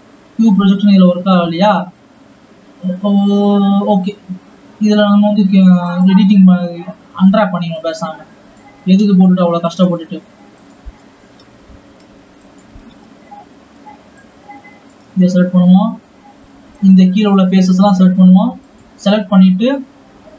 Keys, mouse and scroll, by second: 1.0 scroll up 1, 6.0 click.